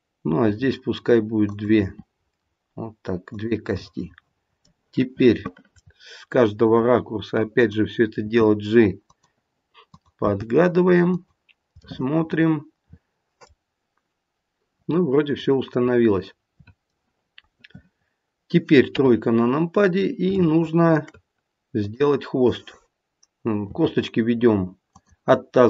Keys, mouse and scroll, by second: 0.5 e, 1.7 e, 3.8 middle click, 5.7 middle click, 7.6 click, 8.2 g, 9.8 click, 10.2 g, 11.8 middle click, 15.6 middle click, 16.2 middle click, 18.8 KP_3, 19.4-20.2 scroll up 2, 20.4 shift+middle click, 21.7 click, 23.6 e.